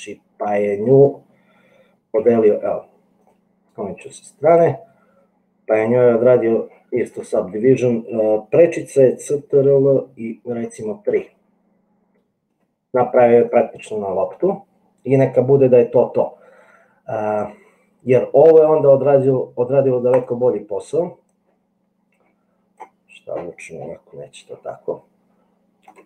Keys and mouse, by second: 2.3 g, 4.3 g, 10.8 ctrl+3, 12.7 right click, 21.4-22.9 drag, 24.6 g.